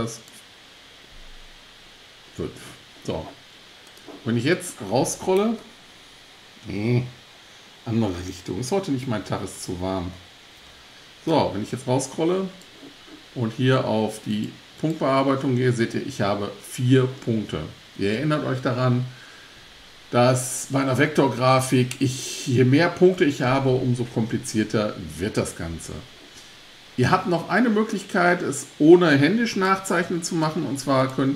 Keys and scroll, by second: 5.7 scroll up 1, 6.4-6.7 scroll up 1, 6.7 scroll down 1, 7.6-8.1 scroll down 1, 29.7 BackSpace.